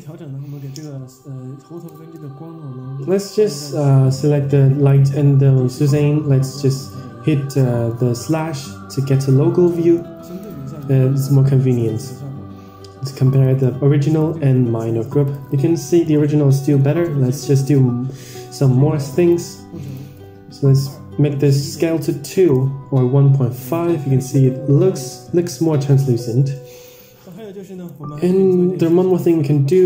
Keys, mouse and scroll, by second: 0.2-0.7 scroll down 1, 0.7-1.6 scroll down 3, 1.7 ctrl+click, 3.8 /, 4.7 click, 6.0-6.8 scroll up 3, 6.8 scroll up 1, 6.8 click, 7.2-7.8 scroll down 4, 7.4 middle click, 8.2 drag, 8.8 middle click, 9.6-9.9 middle drag, 10.5 ctrl+shift+click, 11.1 scroll up 3, 11.7 middle click, 13.3 ctrl+shift+click, 15.2 ctrl+shift+click, 16.0 Tab, 16.5 middle click, 17.1-18.2 scroll up 4, 18.5-19.2 drag, 19.7-20.8 drag, 21.6-23.0 drag, 23.8-24.4 scroll down 3, 24.1-24.4 middle drag, 25.3 middle click, 25.8-26.5 scroll up 3, 26.3 middle click, 27.2-27.8 drag, 29.0 ctrl+z, 29.7-29.8 drag.